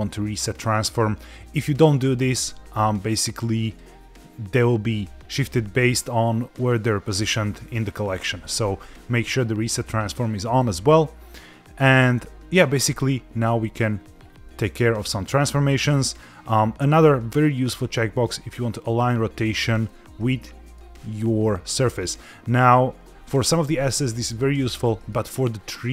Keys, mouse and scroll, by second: 3.7 click, 8.2 click, 11.9 click, 13.6 click, 14.1-16.2 scroll down 4, 19.9 middle click, 21.2-22.2 scroll up 2, 24.8 middle click.